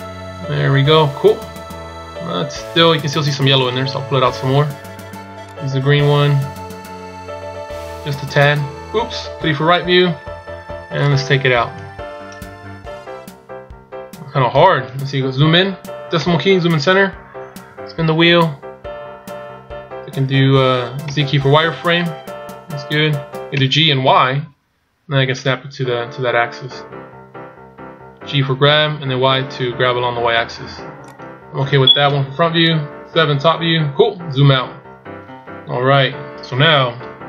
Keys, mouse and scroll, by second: 3.5 right click, 5.6 click, 9.2 KP_3, 10.9 click, 16.0 KP_Decimal, 17.0-17.8 scroll up 1, 17.8-19.0 scroll up 3, 19.0 scroll up 1, 21.0 z, 22.5 z, 23.6 g, 31.9 KP_1, 32.9 KP_7, 33.9-35.1 scroll down 9, 35.6 KP_1.